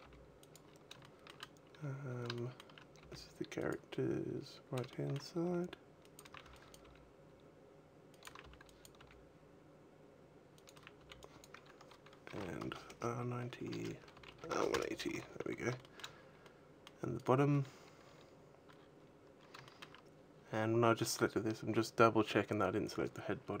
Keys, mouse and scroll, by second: 0.3 click, 0.4-1.4 scroll up 5, 0.8 shift+middle click, 1.5-1.9 scroll up 2, 2.1 shift+middle click, 2.7 g, 3.5 click, 4.5 shift+middle click, 5.2 g, 5.9 click, 6.0 a, 6.2 b, 6.5 g, 8.0 click, 8.0 a, 8.1 b, 8.8 g, 10.4 click, 10.5 a, 10.6 b, 12.1 r, 13.9 r, 14.8 a, 15.2 scroll down 4, 15.6 shift+middle click, 16.1 middle click, 16.9 right click, 18.1 scroll down 2, 18.6-19.0 scroll up 3, 19.4 shift+middle click, 23.1-23.6 scroll up 1.